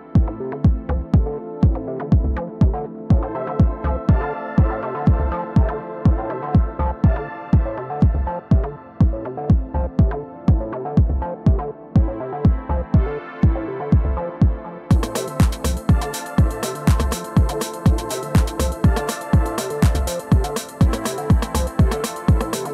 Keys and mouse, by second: 12.1-12.9 alt+drag, 14.0-15.3 alt+drag, 15.8-17.7 alt+drag, 22.3 click.